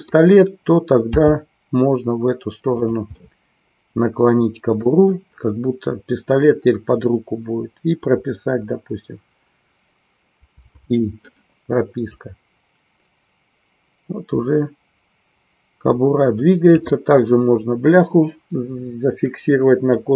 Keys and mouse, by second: 2.9 click, 3.1-4.9 middle drag, 12.1-16.8 drag.